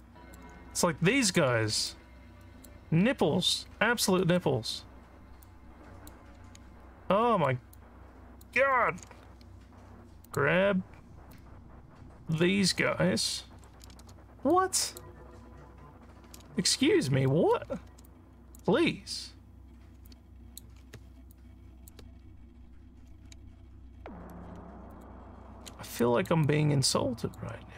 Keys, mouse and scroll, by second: 0.0 alt+middle click, 1.9 alt+middle click, 2.9 alt+scroll down 1, 4.0 click, 5.5 click, 6.8 alt+scroll up 2, 7.3 alt+middle click, 7.9 alt+click, 8.8 alt+middle click, 10.3 click, 11.3-12.5 drag, 14.5 click, 16.6 alt+scroll up 2, 17.4 alt+middle click, 18.1 shift+click, 20.1 alt+click, 21.4 shift+click, 23.5 alt+scroll up 1, 24.9 shift+click, 26.0 alt+click, 26.5 alt+click, 27.6-27.7 scroll up 2.